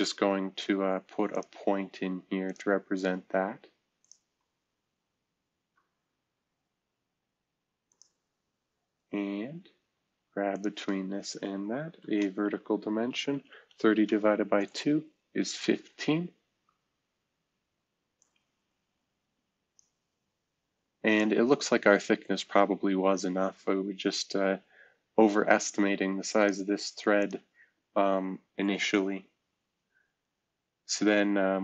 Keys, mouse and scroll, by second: 1.8 Escape, 5.5 v, 7.8 click, 8.6 scroll down 1, 9.2 scroll down 1, 9.7 scroll up 1, 10.5-11.1 shift+drag, 12.0 typing, 13.2-13.7 typing, 14.5 Return, 16.0-16.6 scroll up 1, 16.6-17.0 scroll down 1, 17.0-18.1 scroll up 1, 18.6 typing.